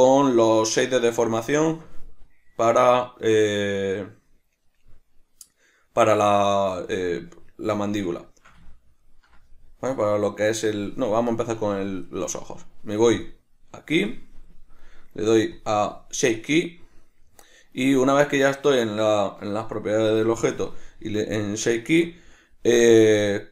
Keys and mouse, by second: 6.2 right click, 8.3-11.3 shift+middle drag, 11.3 right click, 13.1 click, 15.5-23.5 drag.